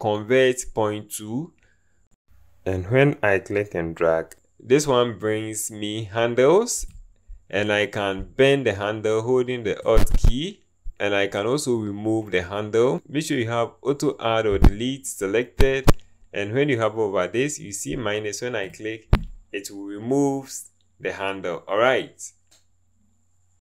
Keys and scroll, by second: 12.9 typing, 14.7 1.